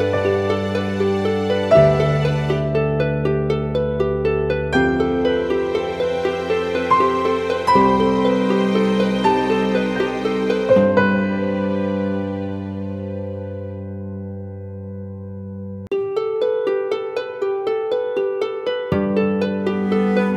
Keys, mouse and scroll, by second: 5.9-8.5 scroll up 1.